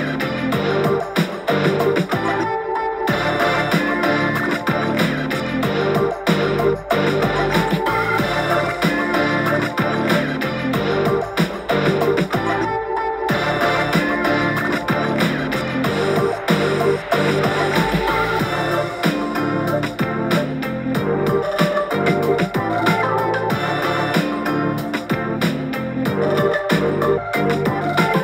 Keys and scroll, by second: 0.4 super+t, 3.8-5.1 typing, 7.4 super+t, 10.0 super+t, 12.1 Page_Up, 12.4 Page_Up, 13.9 super+t, 15.0 super+j, 15.3 super+t.